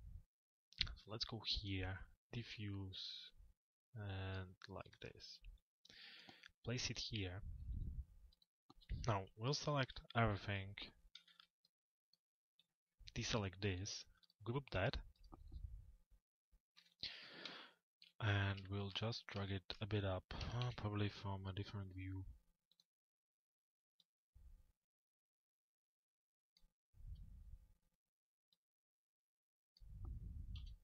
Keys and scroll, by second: 0.9 m, 16.3 p, 27.0 F4, 30.6 p.